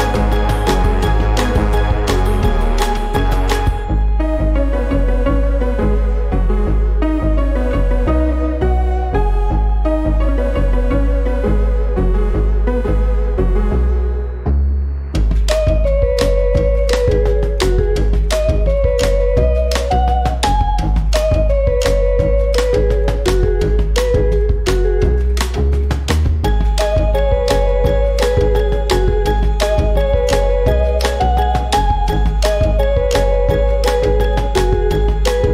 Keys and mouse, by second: 3.7 click, 4.7 s, 5.6 click, 9.8 click, 10.5-11.7 drag, 18.2 click, 19.2-19.9 drag, 24.8 click, 25.9 click, 27.1 click, 27.8 space, 28.3-29.0 drag, 30.1 ctrl+shift+f, 32.7 click, 34.3 click.